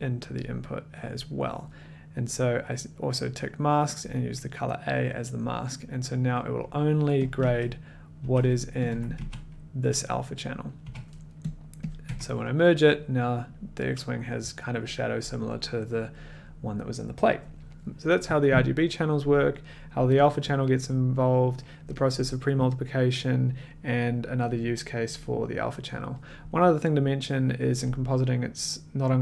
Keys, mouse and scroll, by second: 0.3 click, 0.9 click, 7.2 click, 7.4-12.3 typing, 8.8 click, 11.5 click, 11.6 middle click, 12.0 click.